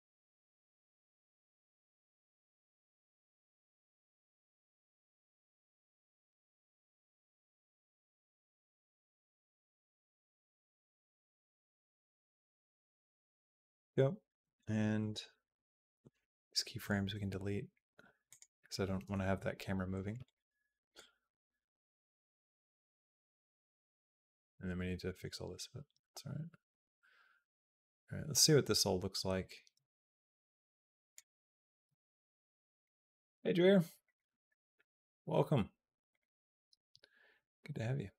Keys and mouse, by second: 1.5-2.9 drag, 3.2-4.5 drag, 4.8-6.1 drag, 6.4-9.1 drag, 9.9 click, 11.0-12.4 drag, 16.6-18.2 right drag, 20.0 click, 20.8-31.0 drag, 32.6 click, 33.1 click, 33.8 click, 34.3 shift+middle click, 35.9 click.